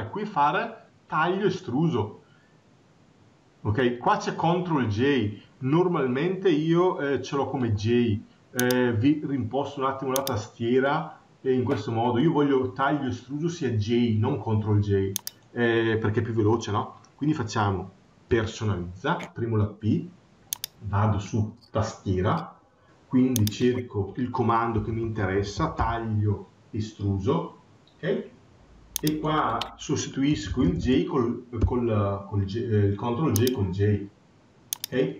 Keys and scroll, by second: 30.1 BackSpace.